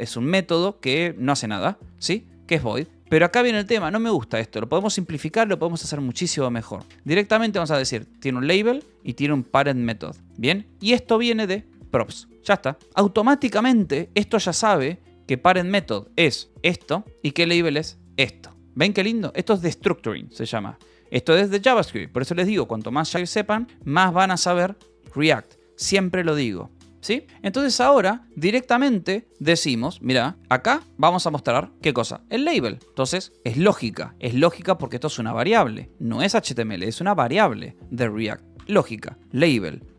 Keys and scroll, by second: 0.0-1.6 typing, 2.9-5.3 typing, 6.5-15.1 typing, 18.9 Escape, 19.5 h, 20.8 j, 21.3 k, 27.4 space, 30.3 j, 30.7 a, 31.2 BackSpace, 32.0 Tab, 33.4 shift+[, 34.1 BackSpace, 38.8-39.7 typing.